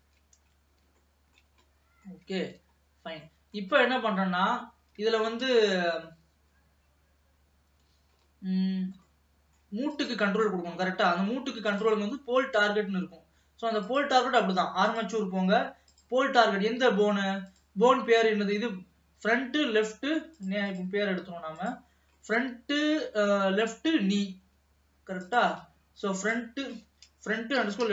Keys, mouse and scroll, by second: 0.2 ctrl+s, 0.5-1.1 scroll up 2, 1.1-2.7 shift+middle drag, 2.7 ctrl+s, 2.8-3.2 scroll down 2, 3.4 middle click, 3.9-4.5 scroll up 1, 4.5 ctrl+s, 4.9-5.2 scroll down 1, 5.2-8.2 shift+middle drag, 8.2-8.6 scroll up 1, 9.1 middle click, 10.0 click, 11.1 middle click, 11.7 click, 13.9-17.7 drag, 18.2-20.5 middle drag, 20.5 click, 20.8 click, 21.7 click, 22.3-25.4 middle drag, 25.4 click, 26.3-27.9 drag.